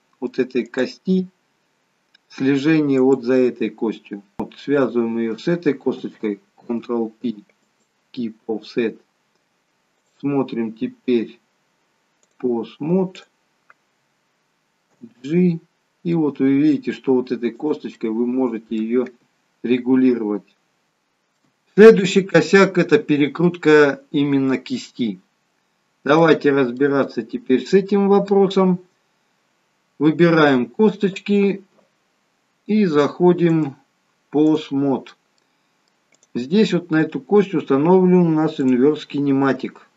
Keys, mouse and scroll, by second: 0.6 click, 3.0 click, 4.8 shift+click, 6.6 ctrl+p, 10.0 click, 13.2 click, 15.0 g, 17.9 middle click, 19.1 g.